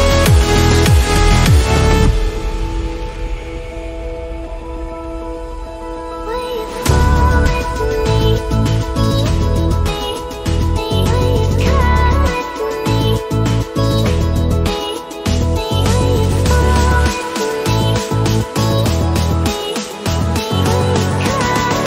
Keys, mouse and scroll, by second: 1.0 click, 2.4 scroll down 1, 3.3 click, 3.5-3.8 scroll down 1, 4.3 click, 5.9-6.3 scroll up 1, 6.5 scroll up 1, 7.2 click, 8.4-8.7 scroll down 1, 9.0 click, 9.8 scroll down 1, 10.2 click, 10.6 scroll down 1, 11.3 click, 12.6 scroll down 1, 13.3 alt+scroll up 1, 14.1 click, 15.3-15.7 scroll down 1, 15.7 space, 15.8 click, 16.0 space, 16.9 click, 18.3 space, 18.4 click, 18.5 space, 19.0 alt+scroll down 1, 19.7-20.4 scroll up 2, 21.0-21.8 alt+drag.